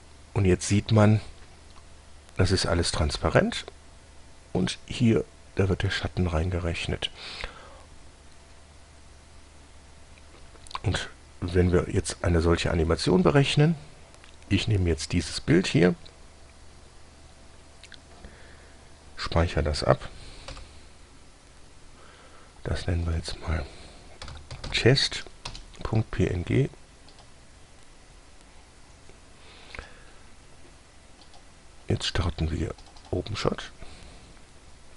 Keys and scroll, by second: 20.8 F3, 24.5-25.9 typing.